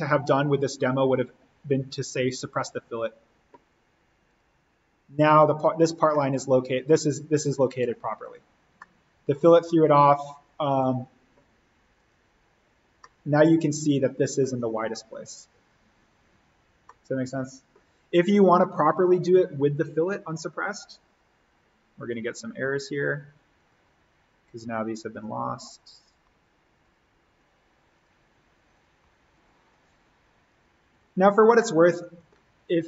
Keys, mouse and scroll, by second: 2.6 click, 6.1-8.2 middle drag, 8.2 click, 8.7-10.6 middle drag, 10.6 click, 13.0-15.2 middle drag, 15.2-16.8 scroll up 1, 16.8-19.8 middle drag, 19.8 click, 30.6 click, 31.5 middle click, 32.5-32.8 scroll up 1.